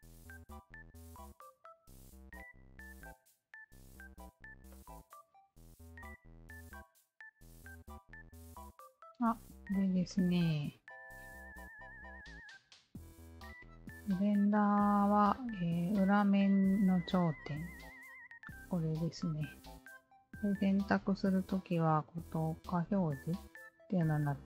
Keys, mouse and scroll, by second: 1.4 alt+click, 2.1 alt+click, 3.3-4.3 alt+drag, 4.7 alt+click, 5.0 alt+middle click, 5.3-6.4 alt+drag, 6.8 click, 7.7 alt+click, 8.8 alt+click, 9.7 alt+click, 10.0 alt+click, 11.5 alt+click, 13.0 shift+v, 14.4 alt+click, 15.3 alt+click, 15.6-17.9 alt+drag, 18.9 alt+click, 20.5 alt+click, 23.7 click.